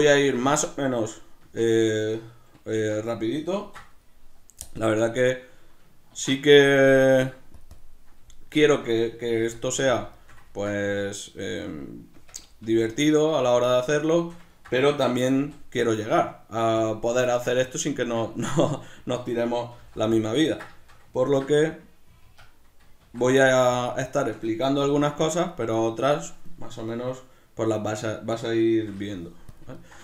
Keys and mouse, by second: 0.2-4.7 ctrl+shift+middle drag, 1.4 Tab, 3.6 ctrl+2, 4.7-7.9 drag, 6.1 ctrl+2, 8.3-10.0 ctrl+middle drag, 9.3 g, 10.0 click, 10.1 shift+middle click, 10.9 Tab, 13.6 click, 13.8 ctrl+middle click, 15.4 s, 16.8 click, 17.2-20.2 shift+middle drag, 19.7 g, 20.2 click, 20.3-25.3 ctrl+middle drag, 21.3 ctrl+s, 24.8 g, 25.3 click, 25.7-28.8 right drag, 28.8 shift+d, 29.6 click, 29.7 ctrl+middle click.